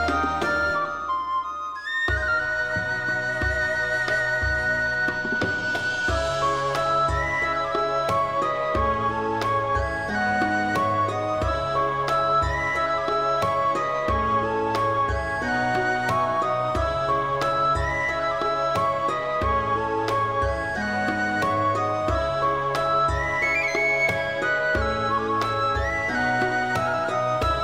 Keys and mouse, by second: 0.1 right click, 0.2 click, 0.6 click, 0.8 g, 1.0 click, 1.2 alt+middle click, 1.3 alt+z, 1.5 shift+middle click, 1.9 shift+middle click, 2.4 alt+z, 2.7 alt+z, 2.8 middle click, 3.1 alt+middle click, 3.3 alt+middle click, 3.8 click, 4.0 g, 4.1 g, 4.4 click, 4.7 click, 4.8 g, 4.9 g, 5.1 click, 6.0 g, 6.8 click, 6.9 middle click, 7.3 alt+z, 7.5 middle click, 8.0 alt+middle click, 8.4 alt+z, 8.4 alt+middle click, 8.7 3, 8.8 alt+middle click, 9.4 shift+middle click, 9.9 middle click, 10.2 middle click, 10.4 shift+middle click, 11.1 i, 11.6 right click, 11.8 ctrl+z, 12.8 click, 14.1 k, 17.5 click, 17.8 2, 18.0 click, 18.7 1, 18.8 click, 19.4 shift+click, 19.8 j, 20.0 shift+click, 20.5 click, 21.6 click, 21.6 j, 21.8 click, 22.1 click, 22.7 middle click, 23.0 g, 23.1 middle click, 23.5 click, 23.6 middle click, 24.0 Tab, 24.3 shift+middle click, 24.5 alt+middle click, 24.7 alt+middle click, 24.8 alt+middle click, 25.0 shift+middle click, 25.8 Tab, 26.0 shift+middle click, 26.5 alt+z, 26.6 middle click, 27.0 middle click, 27.3 alt+z, 27.5 middle click.